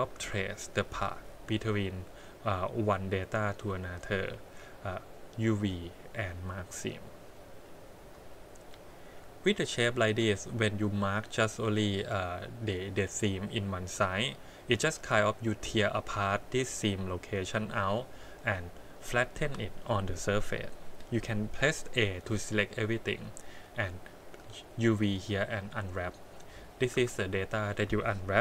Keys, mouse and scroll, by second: 0.2 shift+z, 0.5 middle click, 5.8 click, 7.6 click, 8.7 click, 10.2 a, 16.3 click, 19.4 a, 22.1 click, 23.6 click, 26.9 a.